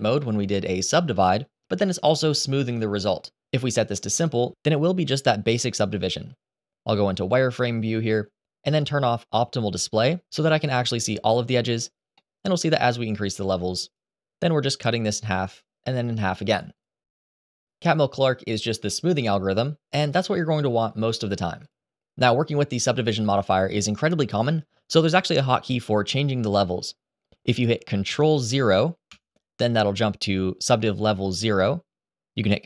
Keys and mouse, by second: 7.5 click, 10.0 click, 11.9 middle drag, 13.6 click, 15.1 click, 18.0 click, 18.1 click, 19.3 click, 28.8 ctrl+0.